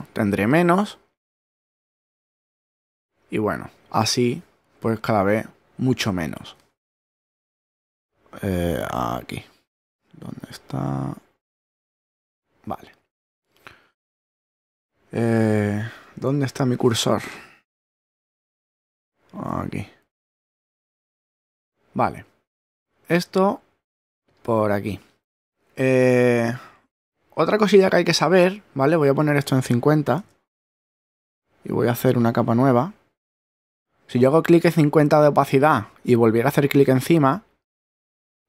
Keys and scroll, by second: 18.5 super+Tab, 30.1 5, 31.2 0.